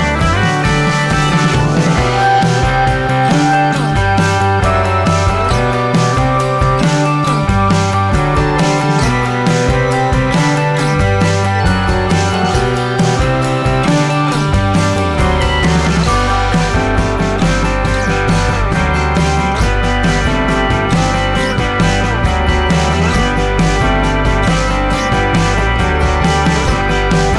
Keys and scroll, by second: 15.5 ctrl+alt+s.